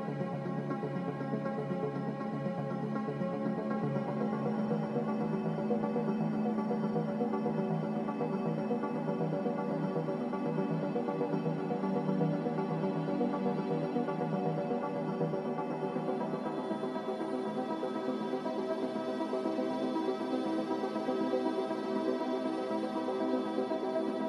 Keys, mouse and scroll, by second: 3.0 x, 4.5-5.4 typing, 6.9 7, 7.2 Return, 12.5 ctrl+z, 13.0 ctrl+z, 18.6 typing, 19.0 Return, 21.9 Escape, 22.9 z, 23.5 x.